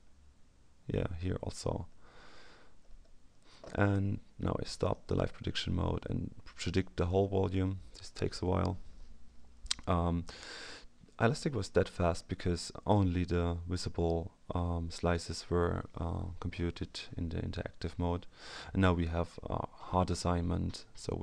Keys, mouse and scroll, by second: 1.8-2.8 scroll down 2, 2.8-3.6 scroll up 2, 4.9 click, 6.8 click, 17.6-19.6 scroll up 2, 20.2-21.1 scroll up 2.